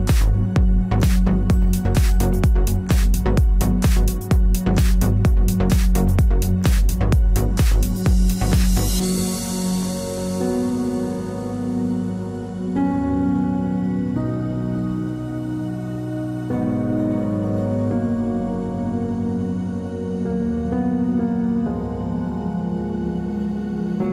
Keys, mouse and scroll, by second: 4.6 a, 6.0-7.1 drag, 6.9 KP_Decimal, 7.4 click, 7.9 middle click, 8.8 a, 9.4 middle click, 9.6-12.8 middle drag, 13.1 KP_3, 13.3 z, 16.8 z, 19.2 KP_3, 20.4 a, 21.2-23.0 drag, 22.5 a, 23.6 KP_3.